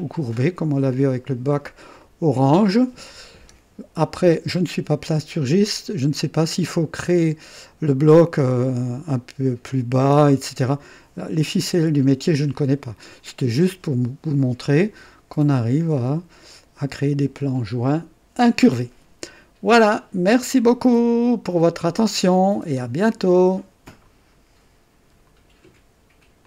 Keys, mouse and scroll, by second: 1.9-2.8 right drag, 23.9 right click, 25.2 right click, 26.4 click.